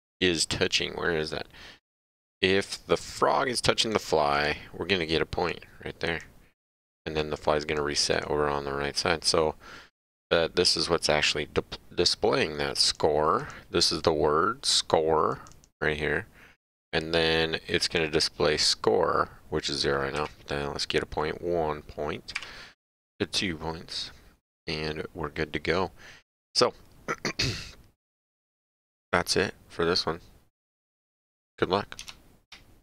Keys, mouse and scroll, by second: 3.2 click, 4.3 click, 5.5 click, 6.6 click, 11.3 click, 13.4 click, 15.3 click, 17.8 click, 20.1 Up, 22.3 Up, 24.5 click.